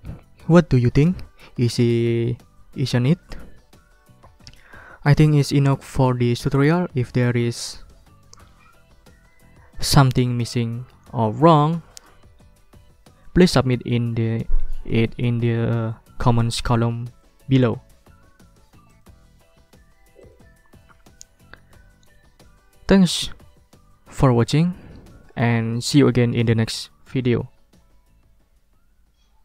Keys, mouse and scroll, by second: 18.9 click, 20.2 click.